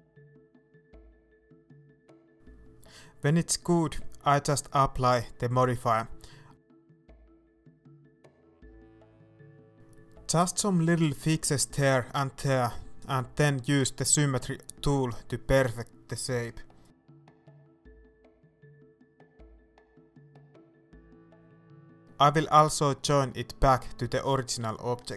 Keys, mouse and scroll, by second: 0.2-2.9 shift+middle drag, 0.3 scroll down 2, 2.9 click, 3.6-6.0 middle drag, 3.9-4.2 scroll up 2, 4.6 scroll down 2, 5.6-6.0 scroll up 2, 6.3 scroll down 1, 6.3-7.0 scroll up 1, 7.2 Tab, 7.4-7.7 scroll up 1, 7.8 right click, 8.3-8.7 scroll down 1, 9.6 click, 10.5 right click, 11.0 middle click, 12.2 KP_1, 13.0 KP_3, 14.1 shift+middle click, 14.5 scroll up 1, 18.8 shift+click, 19.1-19.4 scroll down 1, 19.4-21.2 scroll up 1, 21.2 click, 21.9 shift+middle click, 22.2-22.7 scroll up 1, 22.7 scroll down 1, 23.0 shift+middle click, 23.4 scroll down 1, 23.6 shift+middle click, 23.9-24.5 scroll up 1, 24.5-25.1 shift+right drag.